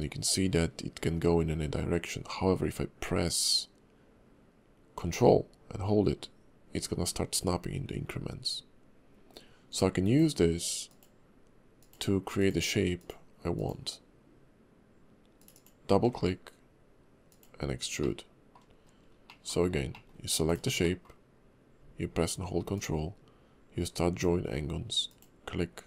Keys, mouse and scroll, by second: 18.0 middle click, 18.7-19.3 scroll up 2, 19.3 middle click, 19.6-19.9 scroll down 2, 19.9 middle click, 20.5 click, 20.8 middle click, 22.7 ctrl+click.